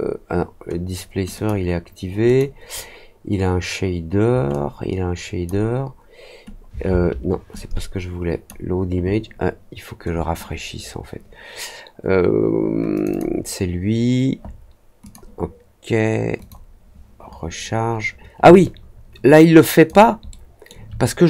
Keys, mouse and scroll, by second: 1.3 click, 2.2 click, 4.4-5.4 drag, 7.5-8.4 drag, 12.9 click, 13.0 click, 15.0 click, 16.3 click, 18.5-19.8 alt+drag, 20.2-20.6 alt+middle drag.